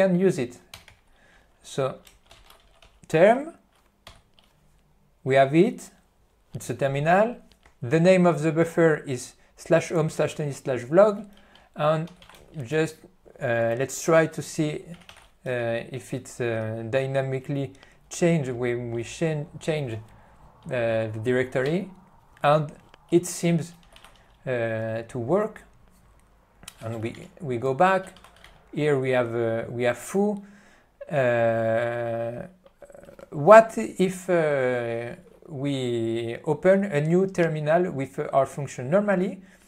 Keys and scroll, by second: 4.4 Return, 12.3 c, 12.4 space, 27.1 -, 27.3 Return.